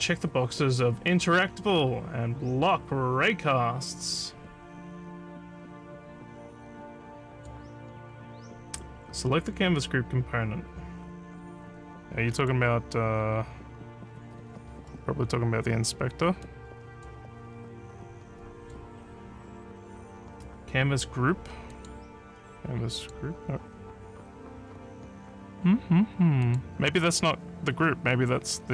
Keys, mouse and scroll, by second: 7.4 click, 12.4 right click, 16.4 click, 18.6 click, 21.7 click, 23.0 click, 23.5 scroll up 1, 26.5 click.